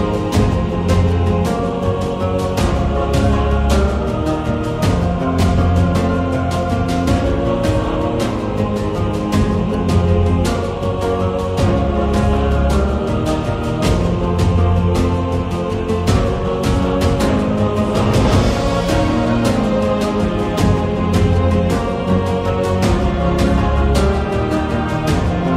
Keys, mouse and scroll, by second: 6.1 Tab, 7.0-8.9 typing, 13.0 Tab, 13.6 a, 13.7 a, 15.6 Tab, 15.6 1, 15.9 click, 16.2 middle click, 17.1 ctrl+b, 21.4 Tab, 21.4 middle click, 21.7 a, 21.8 a, 22.7 middle click, 23.4 Tab, 23.4 click, 25.3 g.